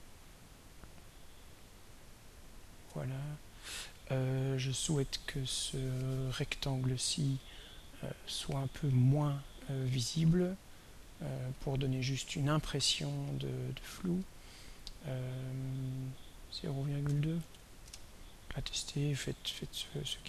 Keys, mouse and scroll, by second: 11.0 click, 11.6 click, 16.8-18.1 typing.